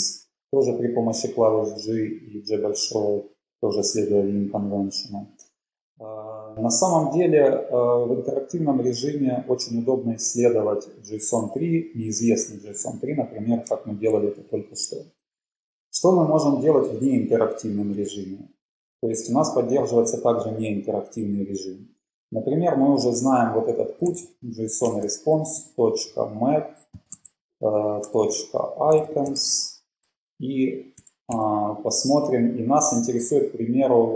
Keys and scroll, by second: 18.3 ctrl+`, 23.7-30.0 typing, 31.1-31.8 typing.